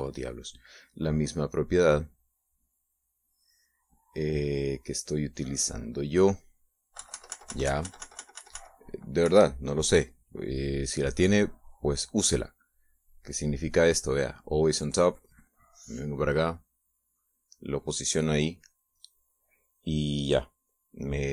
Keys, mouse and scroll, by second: 3.4-5.1 drag, 7.8 KP_Subtract, 10.1 KP_Subtract, 10.6 middle click, 11.3-12.3 scroll up 1, 12.3 click, 13.8 click, 15.4 click, 16.4-18.6 drag.